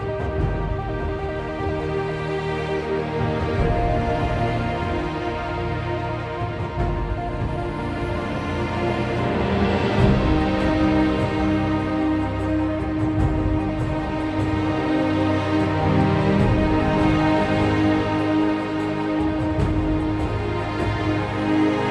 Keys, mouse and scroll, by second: 5.9 ctrl+z, 6.7 ctrl+z, 7.4 ctrl+z, 8.3 ctrl+z, 13.7 ctrl+z, 16.4 ctrl+z, 18.8 ctrl+z.